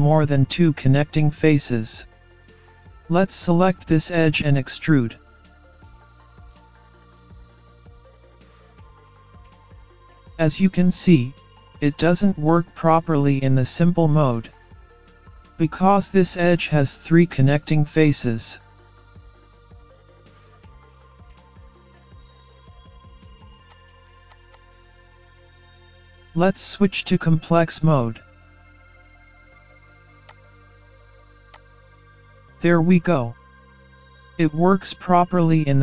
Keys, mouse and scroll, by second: 2.7 alt+z, 4.4 click, 6.9 KP_3, 8.5 e, 12.6-13.1 scroll down 5, 13.2 scroll up 1, 13.8-14.4 scroll up 1, 18.9 alt+z, 19.9 middle click, 21.8 KP_3, 22.4 scroll up 1, 23.7 click, 24.3 click, 24.5 click, 30.3 click, 32.9-33.3 scroll down 2, 33.3-33.7 scroll up 2.